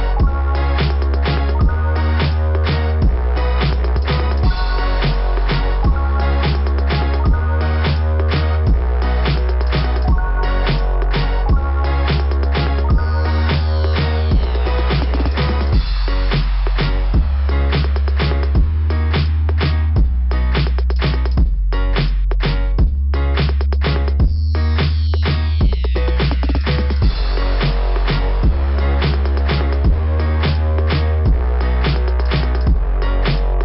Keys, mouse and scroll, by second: 2.8 click, 5.0 click, 8.8 scroll down 2, 8.8 [, 9.1 scroll up 2, 11.9 click, 12.0 click, 13.6 click, 14.4 click, 15.5 click, 17.8 click, 19.0 click, 20.7 scroll down 2, 23.4 scroll down 2, 24.3 click, 25.7 click, 26.1 scroll up 2, 29.1 scroll down 2, 31.2 scroll down 2, 32.4 scroll down 1.